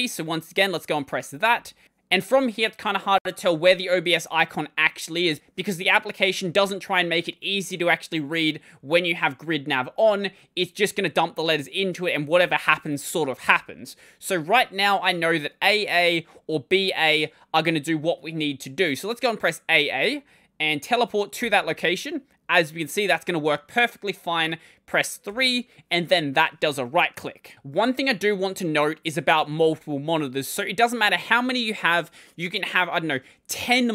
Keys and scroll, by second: 1.0-1.9 typing, 19.6 a, 19.7 a, 21.2 w, 25.1 3.